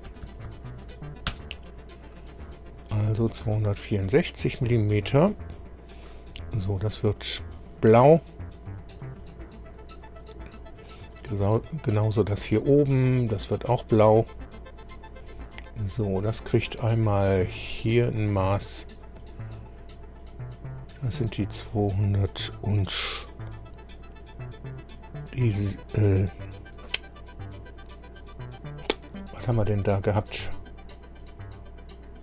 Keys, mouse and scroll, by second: 0.1 Delete, 0.2 Delete, 0.5 Delete, 0.8 Delete, 1.3 Return, 3.7-5.0 drag, 7.2 click, 8.9 click, 10.7 scroll down 1, 11.1 shift+middle click, 12.6 click, 14.7 click, 17.2 click, 18.9 click, 20.9 click.